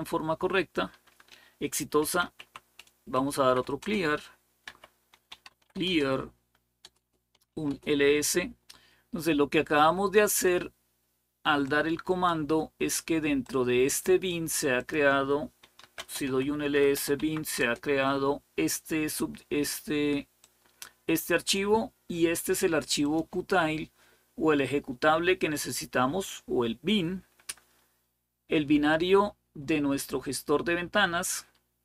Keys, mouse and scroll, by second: 1.6-7.6 typing, 6.6 Return, 6.9 Return, 11.5-12.8 drag, 13.2 click, 14.6 click, 15.2-17.3 typing, 17.4 Return, 20.2-22.0 drag, 22.8 click, 29.4-29.9 scroll down 1, 30.3-31.0 scroll down 1.